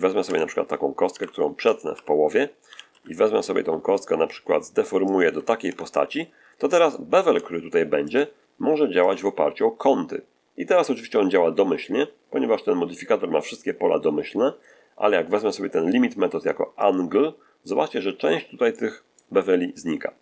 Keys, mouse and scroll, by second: 0.2 Tab, 1.0 r, 1.6 ctrl+click, 1.9 Escape, 2.6 g, 2.8 x, 5.0 ctrl+click, 5.6 ctrl+Tab, 6.3-6.7 ctrl+scroll up 1, 6.8-7.4 shift+middle drag, 8.0 shift+click, 8.9 click, 16.7 click, 18.0 middle click, 18.0-18.3 scroll up 1, 18.6-19.3 shift+middle drag.